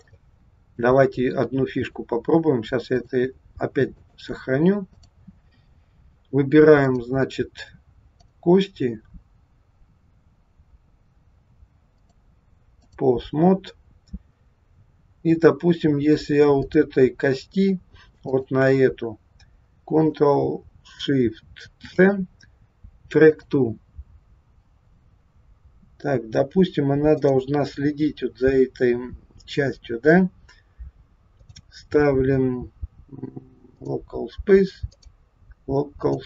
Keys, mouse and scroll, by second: 0.1 middle click, 1.6 click, 3.0 click, 4.0 click, 6.2-6.8 scroll up 2, 6.8 click, 8.2 click, 12.0 click, 16.7 click, 18.3 shift+click, 21.7 ctrl+shift+c, 24.3-24.9 scroll down 2, 27.0 click, 31.3 click, 34.8 click.